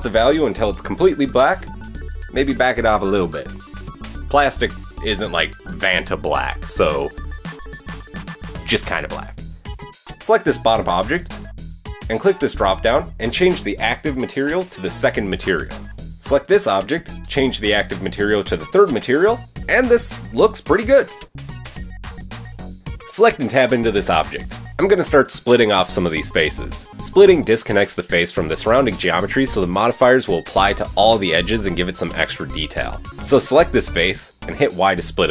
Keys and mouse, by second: 1.2-2.5 middle drag, 10.8 click, 11.0 Tab, 11.2-13.8 middle drag, 11.2 a, 13.8-19.4 drag, 14.7 Tab, 15.0 middle click, 15.0 right click, 15.9 middle click, 15.9 right click, 16.2 Tab, 16.6 a, 19.0 Tab, 19.4 middle drag, 19.5-21.0 drag, 21.0-22.9 middle drag, 22.9 click, 23.0-23.8 middle drag, 25.1 Tab, 25.3-32.1 middle drag, 32.1 click, 33.7 y, 34.3 Escape.